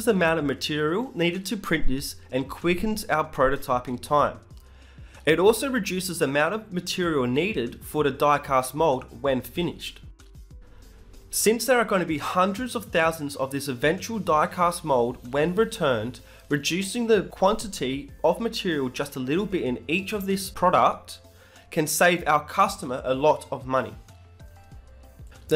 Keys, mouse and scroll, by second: 0.4 click, 1.0 z, 1.1 right click, 1.2-3.1 middle drag, 3.8 e, 4.4 g, 6.7 z, 7.7 g, 9.1 z, 10.2-11.4 middle drag, 11.3 ctrl+z.